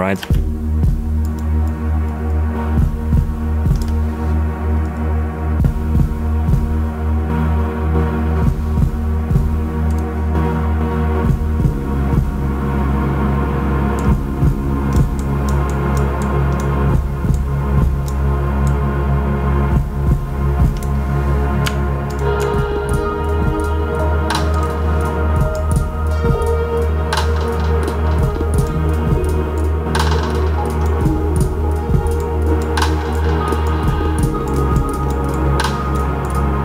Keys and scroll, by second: 0.1 space.